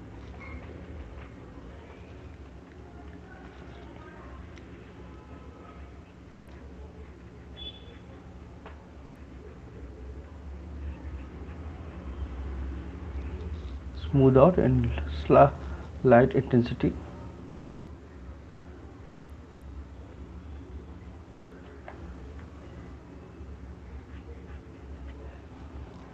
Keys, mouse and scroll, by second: 0.8 click, 1.6 click, 2.7 ], 2.9 ], 3.1 ], 3.3 ], 4.3 click, 4.7 click, 5.5 click, 6.0 click, 6.4 click, 6.9 click, 7.2 click, 7.6 click, 10.3 click, 12.1-12.8 shift+click, 12.4 shift+click, 13.8 shift+click, 14.0 shift+click, 14.2 shift+click, 14.9 shift+click, 15.5 click, 16.2 click, 16.9 click, 17.2 click, 17.9 click, 18.5 click, 18.7 click, 19.5 click, 19.9 shift+click, 20.6 click, 21.0 shift+click, 21.2 shift+click, 21.6 right click, 21.6 shift+click, 22.6 click, 25.1 shift+click.